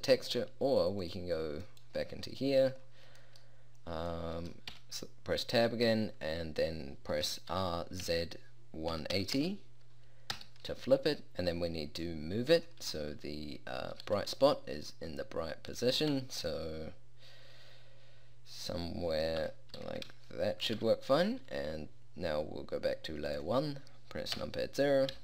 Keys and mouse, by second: 4.8 Tab, 7.6 r, 11.3 Tab, 12.1 click, 14.1 g, 16.2 Tab, 19.9 Tab, 19.9 g, 20.9 Tab, 24.5 KP_0.